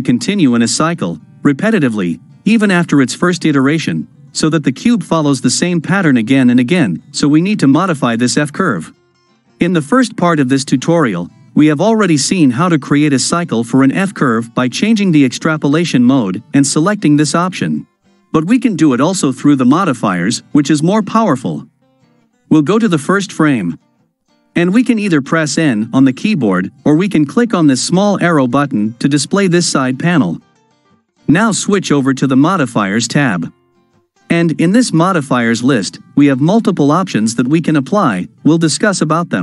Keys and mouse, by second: 13.2-15.5 right drag, 15.5-17.7 drag, 22.8 shift+Left, 28.0 click, 32.5 click, 34.7-39.3 drag.